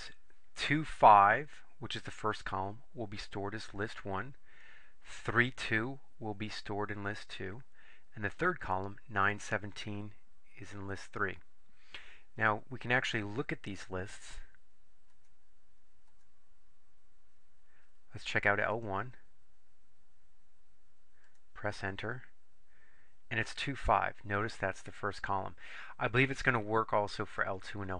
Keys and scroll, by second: 18.9 Return, 21.4 Return.